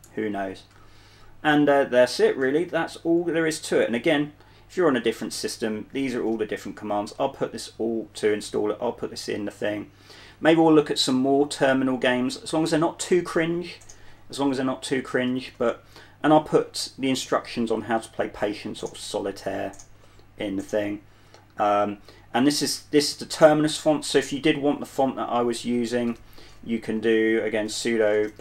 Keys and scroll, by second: 0.2 super+2, 2.9-9.9 typing, 25.2 super+1, 26.4-28.4 typing.